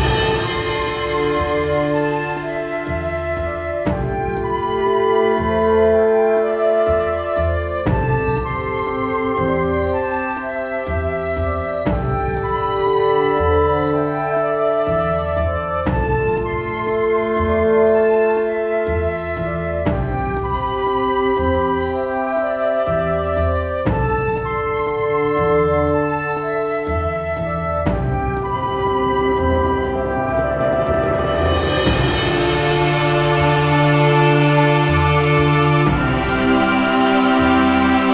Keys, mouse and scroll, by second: 0.0 ctrl+j, 0.8 click, 1.3 alt+middle click, 2.4 alt+scroll, 4.4 alt+scroll, 5.0-5.8 alt+scroll, 6.1-6.6 alt+scroll, 7.3 click, 8.6 click, 10.1 click, 10.7 alt+scroll, 12.2 click, 13.9 alt+scroll, 16.6 click, 17.8 alt+scroll, 18.8 click, 19.9 alt+middle click, 20.7 click, 21.2-21.6 alt+scroll, 22.1-22.4 alt+scroll, 22.8 scroll, 23.6 click, 24.8 middle click, 25.7 click, 26.8 click, 28.5 scroll, 29.8 scroll, 31.4 middle click, 32.3 ctrl+k, 33.1 click, 33.4 ctrl+k, 34.4 click, 35.1 alt+middle click, 35.9 click, 36.4 shift+click, 37.0 ctrl+h.